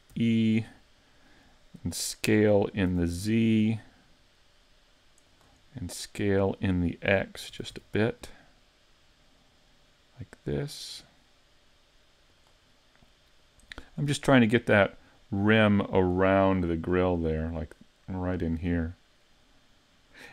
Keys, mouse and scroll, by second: 0.1 e, 0.5 click, 2.9 s, 5.7 middle click, 7.5 s, 12.7 middle click, 14.1 click, 15.2 click, 16.9-17.3 scroll up 3, 17.3 middle click, 18.9 middle click.